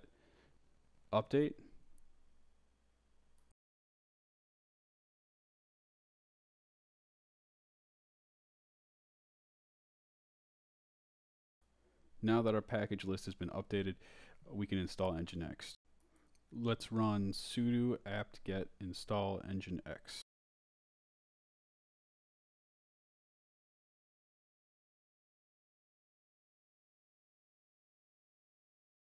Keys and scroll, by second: 0.0-2.9 typing, 3.3 Return, 4.2-5.9 typing, 17.0-22.4 typing, 23.9 y, 24.6 Return.